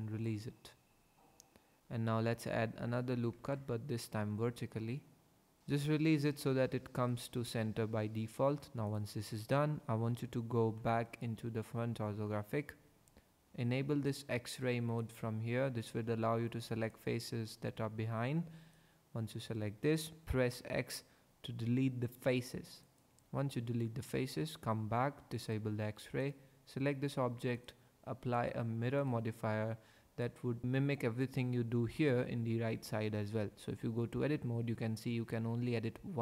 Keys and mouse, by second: 1.8 ctrl+r, 3.3 ctrl+r, 5.6 ctrl+z, 5.6 ctrl+r, 8.9 click, 10.2 KP_5, 10.6 KP_1, 12.7 3, 15.1 click, 16.9 click, 20.5 x, 24.1 Tab, 25.4 click, 26.2 click, 27.6 click, 28.4-30.4 drag, 34.2 Tab.